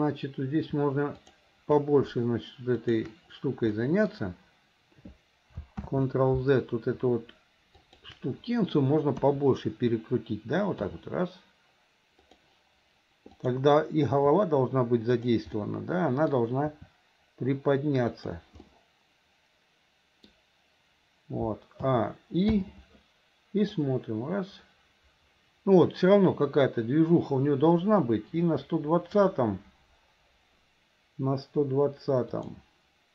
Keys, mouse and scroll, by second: 1.2 shift+click, 2.8 shift+click, 3.8-4.2 middle drag, 5.9 ctrl+z, 7.8 shift+click, 9.2 KP_1, 10.9 r, 13.4 click, 15.1 r, 15.6 middle click, 18.2 r, 18.7-20.3 middle drag, 21.9 a, 22.6 i, 23.8-29.3 drag, 32.4 click.